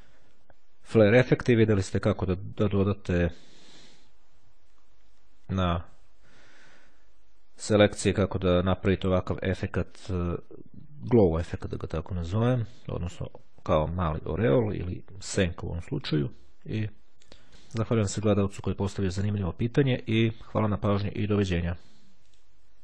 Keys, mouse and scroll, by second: 4.4-5.3 ctrl+scroll up 2, 16.3-17.5 ctrl+scroll down 2.